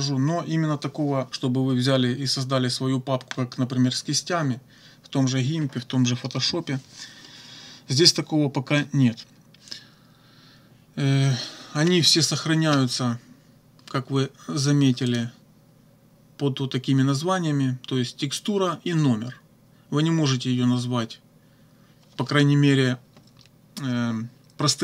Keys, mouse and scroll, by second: 15.1 click.